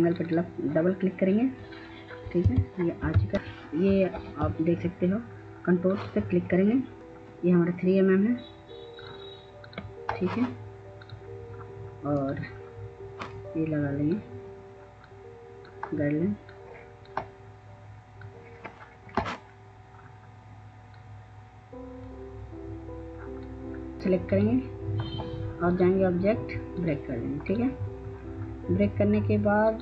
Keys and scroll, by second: 2.4 F4.